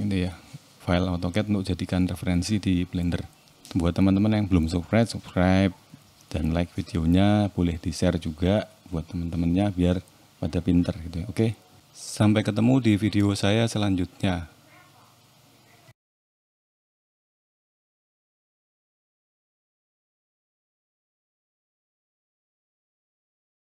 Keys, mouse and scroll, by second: 9.6 middle click, 10.9 ctrl+s.